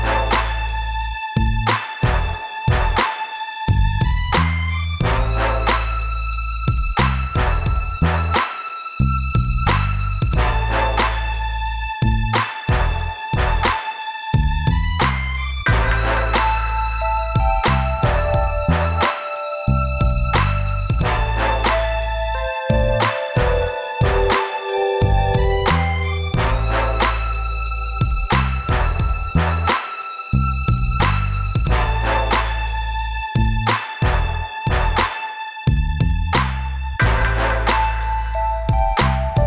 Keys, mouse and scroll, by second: 0.5 click, 1.4 click, 2.5 scroll down 1, 3.3 click, 4.6 middle click, 5.7 click, 6.6 click, 6.7 click, 7.1 scroll up 2, 8.4 click, 10.0 scroll up 2, 10.8 scroll up 1, 11.6 scroll down 2, 12.4 scroll up 1, 12.6 scroll down 1, 12.7 scroll up 1, 14.7 click, 17.5 scroll down 2, 17.9 click, 18.9 click, 19.6 click, 20.2 click, 21.1 click, 21.9 click, 22.4 scroll down 2, 25.3 middle click, 26.3 click, 27.9 click, 30.4 scroll up 2, 31.5 scroll down 2, 31.6 scroll up 2, 31.7-32.2 scroll down 2, 33.7 click.